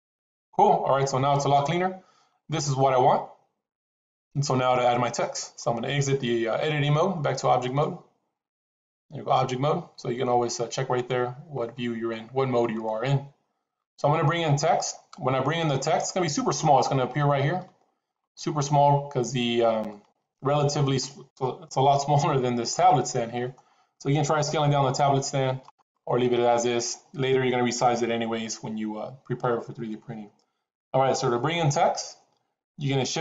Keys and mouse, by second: 1.2-5.3 middle drag, 7.6-8.7 drag, 11.5-12.0 middle drag, 12.7-14.2 middle drag, 15.9 middle click, 18.6 middle click, 19.8 middle click, 22.6 middle click, 24.5 s, 33.0 shift+a.